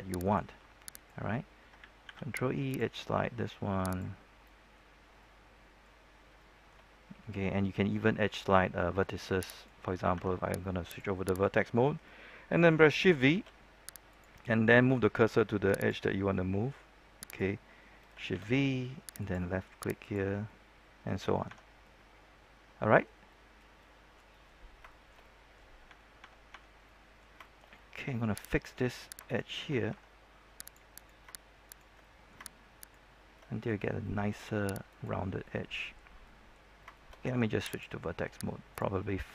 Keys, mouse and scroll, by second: 0.1 right click, 2.0 ctrl+e, 2.6 click, 4.2 scroll down 1, 4.4 middle click, 4.8 scroll up 1, 5.1 middle click, 6.3 shift+middle click, 7.2-7.7 scroll up 1, 7.7 scroll down 1, 7.9 middle click, 8.3 scroll up 1, 8.6 middle click, 9.5 right click, 10.8 ctrl+Tab, 10.8 click, 11.3 right click, 11.6 middle click, 13.2 shift+v, 14.0 click, 16.0-17.2 middle drag, 17.2 right click, 18.3 shift+v, 19.1 click, 20.4 middle click, 21.4 Tab, 21.6 scroll down 1, 21.8-24.6 middle drag, 24.6-25.2 scroll up 2, 25.2 middle click, 25.8 Tab, 26.8 middle click, 27.4 shift+middle click, 28.3 right click, 29.2 shift+right click, 29.8 ctrl+Tab, 30.6 click, 30.9 right click, 31.6 shift+right click, 31.9 middle click, 32.7 shift+right click, 33.3 shift+middle click, 34.8 right click, 35.4-36.6 middle drag, 36.6 scroll up 1, 36.9 shift+middle click, 37.2 ctrl+Tab, 37.7 click, 37.9 middle click, 38.7 right click, 38.9 middle click.